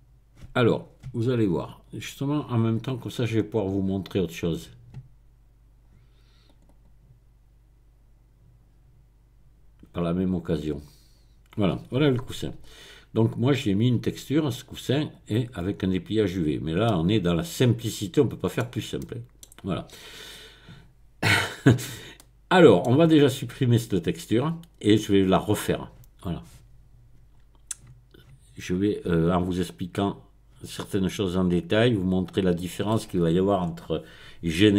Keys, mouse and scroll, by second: 0.7 click, 1.7 click, 2.8 click, 3.9 click, 6.5 click, 10.7 click, 12.6 click, 13.6-14.2 scroll down 1, 15.1 click, 16.4-16.9 scroll up 1, 16.9 middle click, 17.2-18.7 middle drag, 18.7-19.6 scroll down 2, 22.2-23.2 middle drag, 31.5-32.9 drag, 33.6-34.5 scroll up 1.